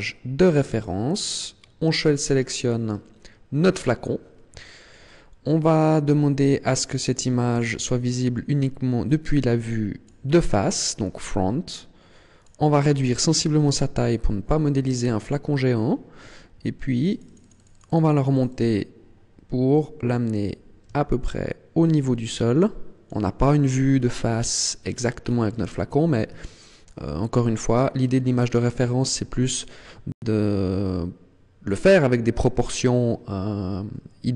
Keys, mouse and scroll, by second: 0.5 click, 4.0 click, 4.8-5.4 scroll up 2, 7.5 click, 12.4 click, 15.0-16.0 scroll up 6, 17.0 click, 17.2 click, 17.4 click, 17.6 click, 17.8 click, 18.0 click, 18.1 click, 18.3 click, 18.4 click, 18.6 click, 19.8 click, 23.6-24.8 scroll up 8, 24.8 scroll down 1, 25.0-25.8 scroll down 8, 26.0 scroll up 1, 26.5 shift+middle click, 27.2 scroll up 2, 28.0 scroll down 1, 28.4 shift+middle click.